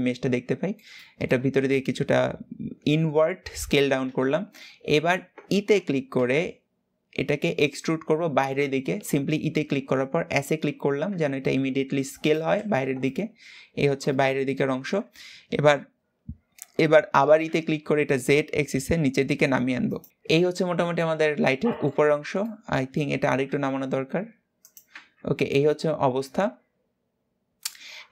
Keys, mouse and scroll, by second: 12.2 alt+z, 12.8-20.3 middle drag, 20.3 scroll down 2, 20.7-21.7 middle drag, 21.7 scroll up 2, 21.9 Tab, 22.1 middle click, 22.9 g, 24.7 Tab, 24.8-25.2 scroll down 3, 25.2-28.1 middle drag.